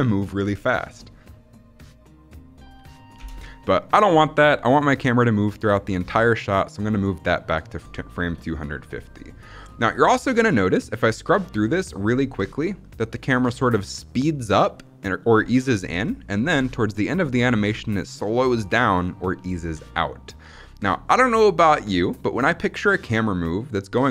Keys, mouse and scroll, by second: 3.0 space, 4.6-6.8 drag, 12.1-22.2 drag.